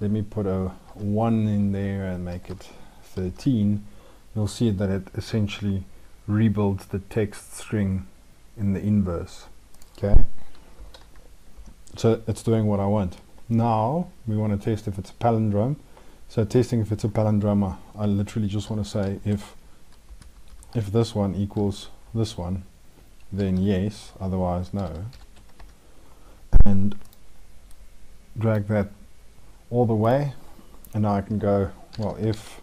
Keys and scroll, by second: 10.6 ctrl+;.